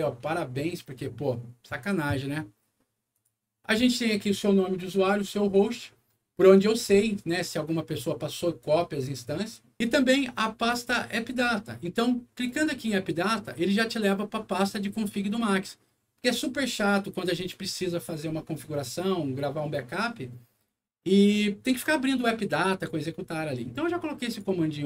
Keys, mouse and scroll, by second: 3.1 click, 12.4 click, 14.8-15.5 scroll down 2, 16.5 scroll up 1, 17.2 scroll down 1, 24.2 click.